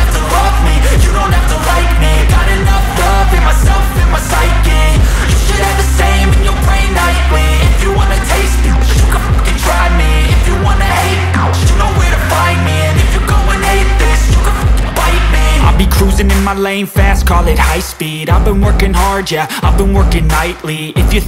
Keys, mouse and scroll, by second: 2.5 scroll, 3.8 click, 13.5-18.6 drag.